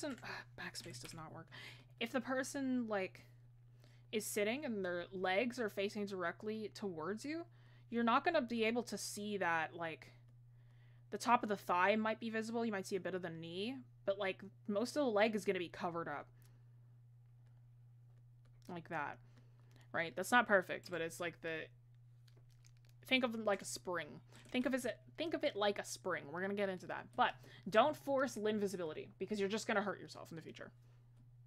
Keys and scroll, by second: 29.0 ctrl+z.